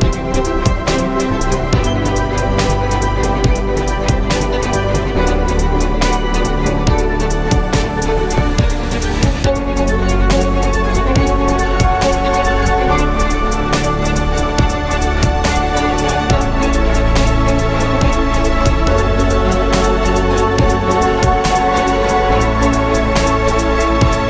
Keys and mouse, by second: 23.9 Tab.